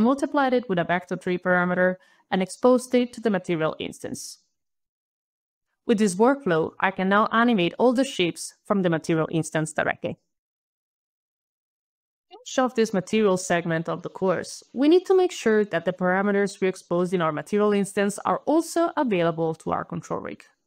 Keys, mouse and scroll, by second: 0.8 alt+click, 3.6-4.1 alt+scroll down 2, 3.9 alt+click, 4.0 alt+right click, 4.6 alt+click, 4.8 alt+click, 4.9 alt+click, 5.1 alt+click, 5.6 alt+click, 6.3 alt+click, 7.2 alt+click, 10.3 alt+click, 10.4 alt+click, 10.5 alt+click, 11.1 alt+click, 11.2 alt+click, 11.3 alt+KP_2, 11.3 alt+KP_Enter, 11.3 alt+KP_1, 11.4 alt+KP_Enter, 11.4 alt+KP_0, 11.6 alt+KP_3, 11.6 alt+KP_5, 11.8 alt+KP_6, 11.9 alt+KP_7, 12.1 alt+KP_Enter, 12.3 alt+click, 12.4 alt+right click, 13.3 alt+s, 13.7 alt+s, 14.7 alt+right click, 16.4 alt+s, 16.4 alt+w, 17.3-18.5 alt+scroll, 18.5-19.1 alt+scroll, 18.9 alt+click.